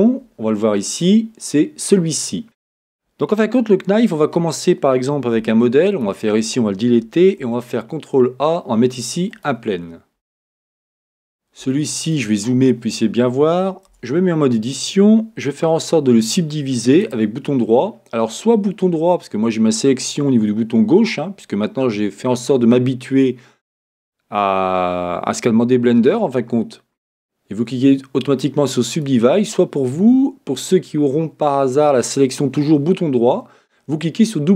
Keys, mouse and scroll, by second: 2.0 middle click, 2.4 click, 4.2 Tab, 5.4 x, 7.4 shift+a, 10.3-17.0 middle drag, 10.9-11.7 scroll up 1, 12.3-12.7 scroll, 12.7-13.9 scroll up 1, 13.9 Tab, 17.0-29.0 right drag.